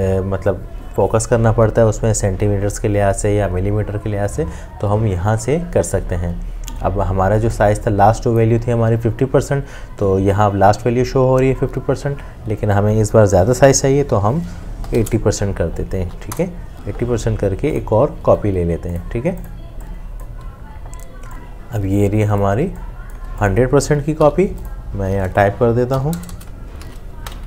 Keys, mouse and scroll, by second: 14.8 typing, 16.3 BackSpace, 22.6 space, 23.1 click, 23.1 space, 24.2 t, 26.0 KP_1, 26.2 KP_0, 26.8 shift+5, 27.1 Escape.